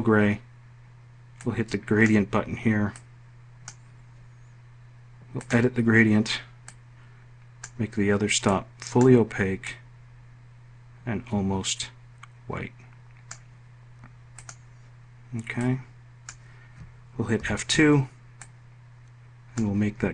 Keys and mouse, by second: 16.9 F2, 17.9-19.2 drag.